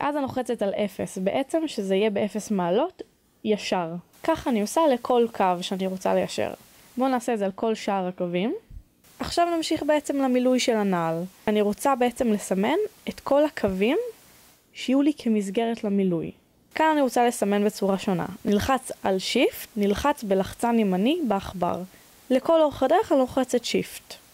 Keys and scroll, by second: 1.5-2.6 typing, 6.9-7.6 typing, 8.4 Return, 12.2-13.7 typing, 14.6 Return, 18.3 a, 21.5 shift+f.